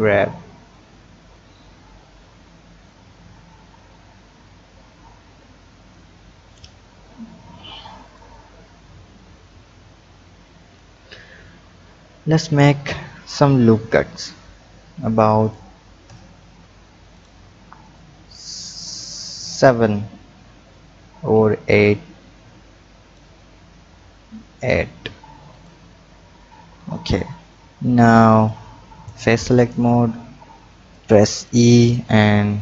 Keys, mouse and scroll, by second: 1.3 middle click, 2.8-5.8 drag, 8.0 click, 9.4-10.7 drag, 10.7-11.9 scroll down 2, 11.9 click, 13.8 ctrl+r, 17.1 click, 18.0-21.0 drag, 25.5 click, 26.4-27.0 scroll up 1, 28.4 click, 29.4 click, 30.0-30.9 scroll up 2, 30.9 click, 32.0 e.